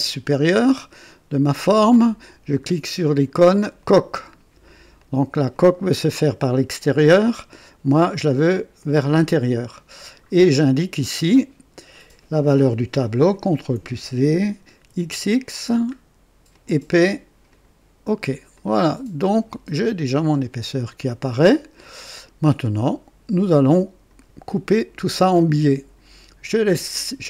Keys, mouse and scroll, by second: 3.8 click, 5.0-5.7 drag, 8.7 click, 11.2 click, 13.4 ctrl+v, 13.5 ctrl+v, 14.8 x, 15.0 x, 15.6-16.5 scroll down 1, 16.6 click, 17.5 click, 18.5-20.2 drag, 20.8 click, 21.8-24.3 drag, 25.4-26.2 drag, 26.6 click.